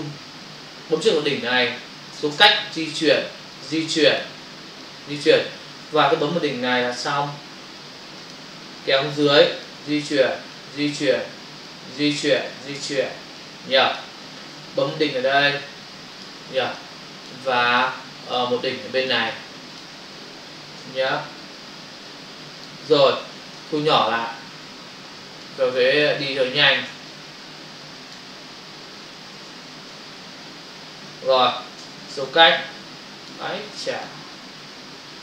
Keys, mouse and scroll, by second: 1.0 click, 8.2 click, 8.6 space, 12.4 space, 14.1 space, 16.2 click, 16.5 space, 19.0 click, 19.2 space, 22.5 click.